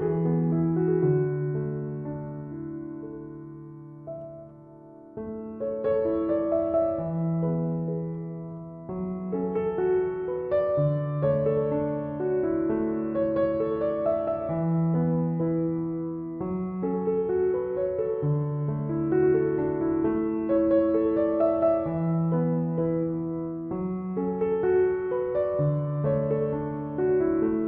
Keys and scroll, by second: 3.8 ctrl+=, 4.7 ctrl+-, 5.9 ctrl+-.